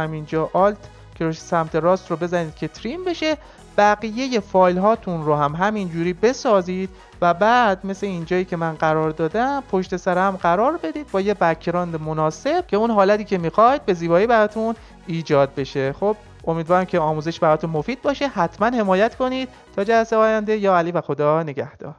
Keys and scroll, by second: 0.8 alt+].